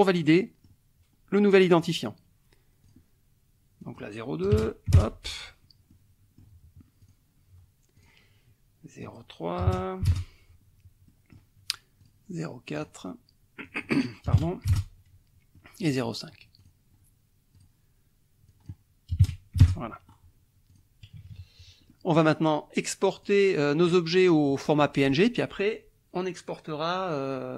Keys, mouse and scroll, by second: 0.3 click, 1.8 click, 2.8 click, 3.8 click, 4.5 KP_0, 4.6 KP_2, 5.0 ctrl+Return, 5.9 click, 7.0 click, 8.0 click, 9.0 click, 9.6 KP_0, 9.7 KP_3, 10.1 ctrl+Return, 11.1 click, 12.0 click, 12.7 click, 13.6 click, 14.3 KP_0, 14.4 KP_4, 14.7 ctrl+Return, 15.5 click, 16.6 click, 17.6 click, 18.5 click, 19.1 KP_0, 19.2 KP_5, 19.6 ctrl+Return, 20.1 ctrl+scroll up 2, 20.7 click, 21.2 KP_Subtract, 21.9 click, 23.2 click, 23.9 click, 24.8 click, 25.0 middle click.